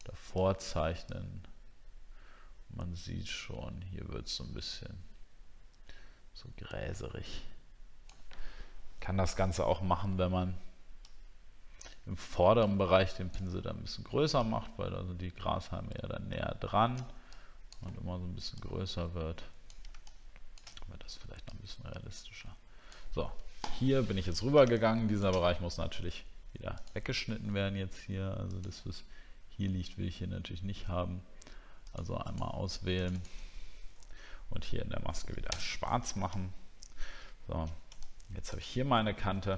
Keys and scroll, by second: 24.3 alt+scroll up 1.